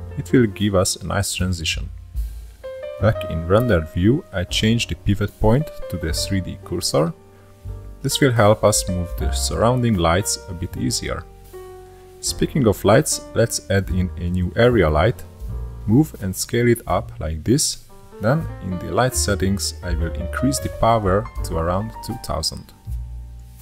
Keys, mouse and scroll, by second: 1.7-2.4 scroll up 1, 2.4-3.1 middle drag, 3.1 click, 5.3-8.4 drag, 8.8-10.5 middle drag, 10.5 shift+a, 15.2 click, 16.7 click, 19.6 click, 20.4-21.9 drag, 21.9 KP_0.